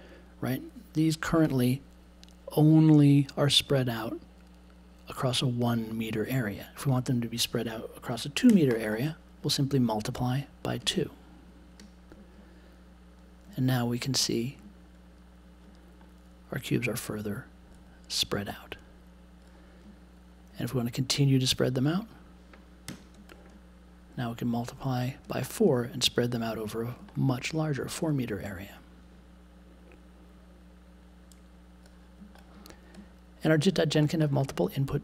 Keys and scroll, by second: 8.5 2, 22.8 4.